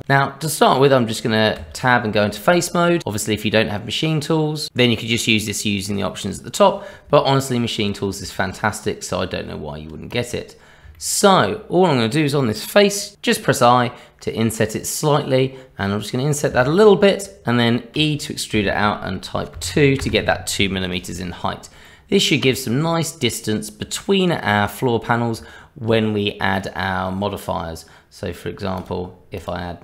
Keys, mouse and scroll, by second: 1.5 Tab, 7.4 shift+middle click, 7.9 scroll up 2, 8.2 shift+middle click, 9.1 Tab, 10.1 click, 10.9 shift+middle click, 13.1 i, 21.3-21.8 scroll down 2, 21.8 middle click, 22.5 shift+middle click, 25.4 Tab, 26.5 click, 28.8 click.